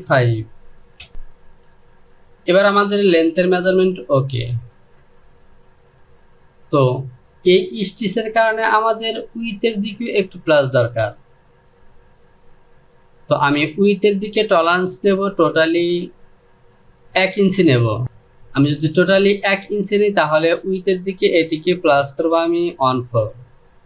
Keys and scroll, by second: 0.6 Return, 1.1 Down, 1.1 KP_0.